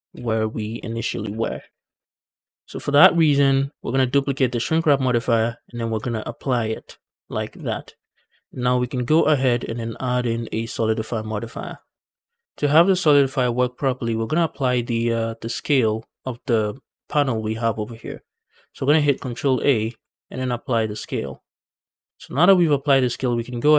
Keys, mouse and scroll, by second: 0.4 ctrl+z, 1.1 ctrl+z, 1.6 ctrl+z, 2.0 ctrl+z, 2.1 Tab, 2.1 scroll down 1, 2.3 shift+middle drag, 2.6 middle click, 3.0 shift+middle drag, 3.8-5.1 scroll down 3, 5.5 click, 6.7 ctrl+a, 7.4 middle drag, 7.7 scroll up 2, 8.1 shift+middle drag, 8.4 middle click, 9.5-11.6 drag, 12.0 scroll down 1, 19.7 ctrl+a, 21.8 scroll up 1, 22.0 middle click, 22.5 shift+middle click, 22.7-23.1 scroll up 1, 23.1 middle click.